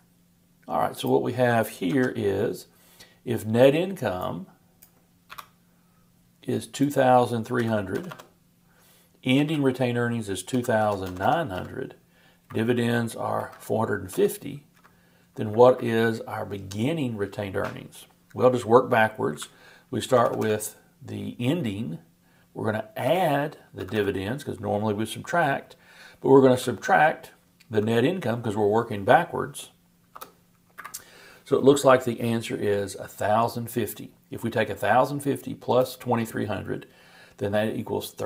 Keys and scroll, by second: 1.9 super+v.